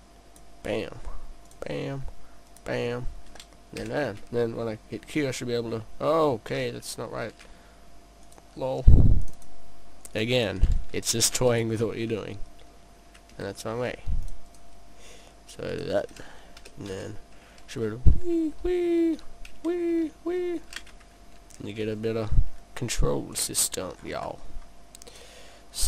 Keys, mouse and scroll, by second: 1.5 click, 2.5 click, 3.9 click, 8.3 click, 9.3 click, 10.2 click, 10.4 click, 11.3 click, 14.3 click, 14.5 click, 16.7 click, 22.6-23.4 scroll down 1, 23.4 click, 23.4-24.0 scroll down 2, 24.0-24.4 scroll down 2, 24.4 middle click, 25.2 click.